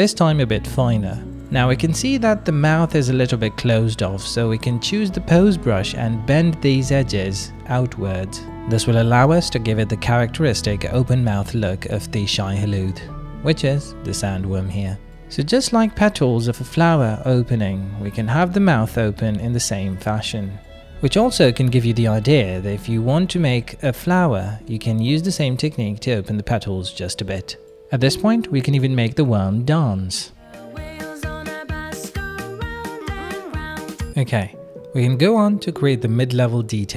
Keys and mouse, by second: 1.2 shift+middle click, 1.3 middle click, 2.9 shift+click, 3.3 f, 3.6 f, 5.5 click, 6.0 shift+click, 6.5 click, 7.6 shift+click, 7.8 click, 7.8 right click, 9.0 ctrl+z, 9.2 click, 9.9 click, 10.3 ctrl+z, 10.4 click, 10.9 f, 11.3 f, 11.8 click, 11.8 f, 13.2 middle click, 14.0 click, 15.1 middle click, 16.9-18.2 middle drag, 18.5 middle click, 20.0 middle click, 20.8 shift+middle click, 21.2 click, 21.2 middle click, 21.2 right click, 22.0 middle click, 22.6 middle click, 25.4-26.7 drag, 25.4-26.7 middle drag, 25.4-26.7 right drag, 26.8 ctrl+middle click, 27.1 shift+middle click, 27.3 middle click, 27.8 f, 28.1 f, 29.0 click, 33.6 ctrl+z, 33.9 middle click, 34.4 shift+middle click, 35.1-36.6 middle drag, 36.8 ctrl+middle click.